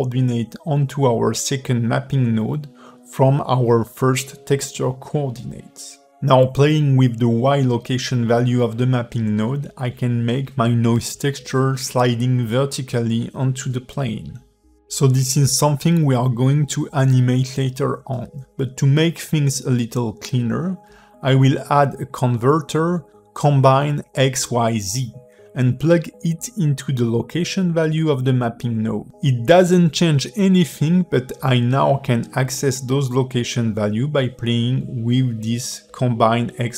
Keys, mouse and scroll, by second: 0.1 click, 0.5 x, 1.5 click, 3.6 click, 9.8 click, 11.1 click, 13.0 click, 14.7 shift+a, 27.8 click.